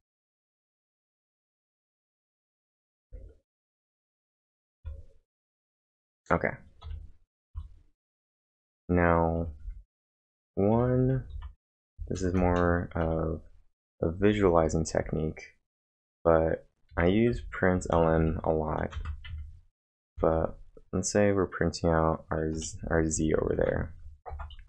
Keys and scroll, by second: 2.2 ctrl+`, 2.9 typing, 4.6-5.7 typing, 6.8 o, 7.5 Return, 10.8 ctrl+v, 11.0-13.0 typing, 14.2-15.0 typing, 16.9-20.1 typing, 22.6-23.6 typing, 24.3 ctrl+`.